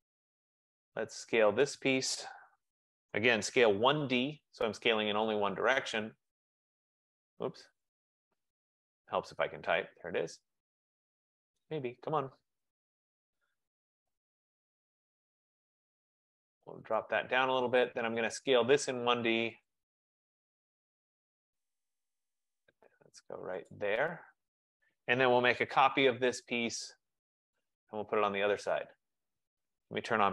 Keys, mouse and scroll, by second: 0.3 Escape, 1.7 click, 2.2-4.2 typing, 5.7 typing, 7.4-8.4 typing, 10.5 F15, 11.9 click, 12.0-12.8 typing, 12.9 Return, 15.2 click, 16.2 click, 17.1 click, 18.4 right click, 19.7 click, 21.0 click, 23.8 click, 25.3-26.4 typing, 27.7 click, 29.1 typing.